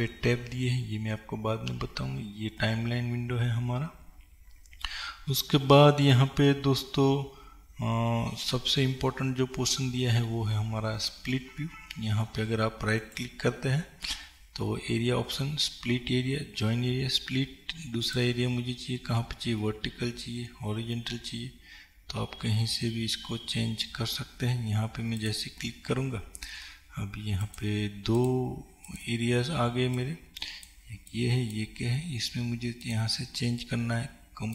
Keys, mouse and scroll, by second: 18.2-31.5 right drag, 31.5 click.